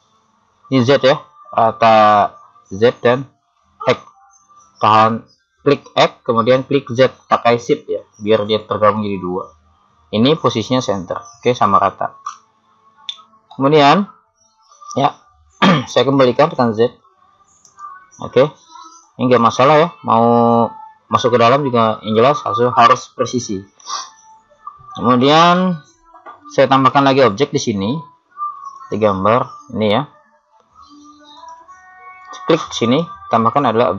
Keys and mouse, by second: 8.5 click, 13.6-15.3 middle drag, 16.7 z, 17.6-20.8 drag, 19.1 right click, 24.0 middle click, 26.1-28.1 middle drag, 32.8 click.